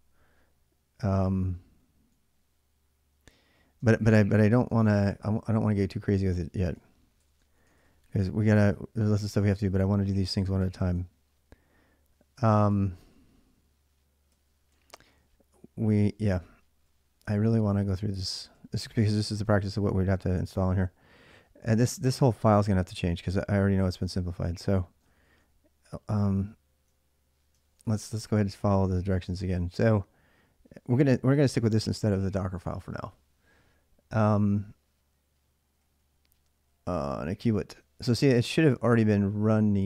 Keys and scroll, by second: 3.4-12.8 typing, 14.1-19.9 typing, 21.3-25.5 typing, 25.9 ctrl+a, 26.1 ctrl+a, 27.4 ctrl+[, 27.6 ctrl+j, 27.6-29.9 typing, 33.0 j, 33.2 j, 33.3 j, 35.6-36.3 typing, 38.3 h, 38.6 h, 38.6 h.